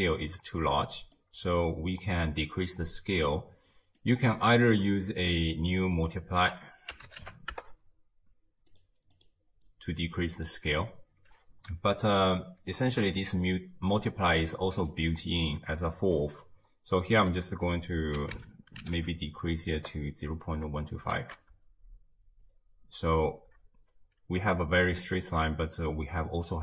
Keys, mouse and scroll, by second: 0.6-1.2 scroll up 1, 1.2 middle click, 1.6-4.0 scroll up 1, 4.0-6.4 middle drag, 6.4 ctrl+a, 9.2-12.3 drag, 13.9 click, 17.2-20.4 drag, 21.2 shift+space, 23.5 space, 23.9-26.6 scroll down 1.